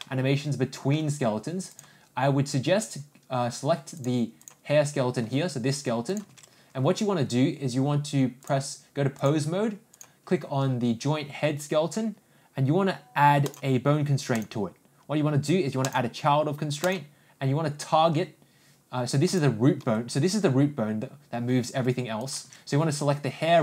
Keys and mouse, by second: 0.0-0.9 middle drag, 1.8 click, 4.0 click, 5.2 g, 8.5-9.3 drag, 10.0 ctrl+click, 14.4-16.1 drag, 16.8-19.4 drag, 19.8 g.